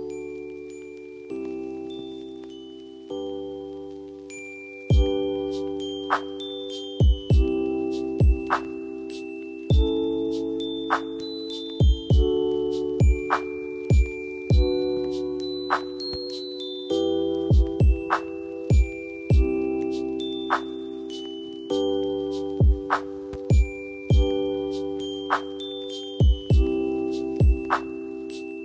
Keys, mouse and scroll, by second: 2.0 l, 2.4 scroll down 1, 3.6-4.8 drag, 5.3 ctrl+g, 6.0 shift+click, 6.7 typing, 7.7 click, 8.8 click, 8.9 F2, 10.6-11.8 drag, 14.5-14.8 click, 15.7 F2, 16.4-17.1 click, 22.9 ctrl+e, 26.1 ctrl+r, 27.8 click, 28.1 ctrl+r.